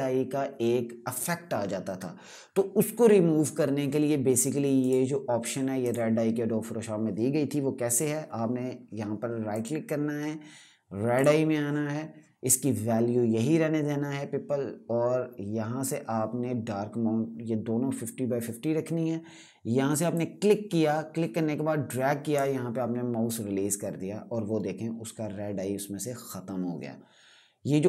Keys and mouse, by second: 4.5 right click, 5.5 click, 9.2 right click, 10.9 click, 19.8 click.